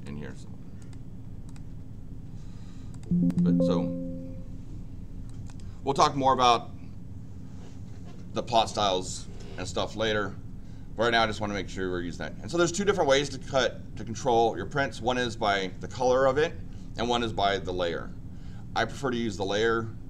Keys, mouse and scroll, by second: 0.8 click, 1.4 click, 2.9 click, 3.2 click, 5.3 click, 6.4 click.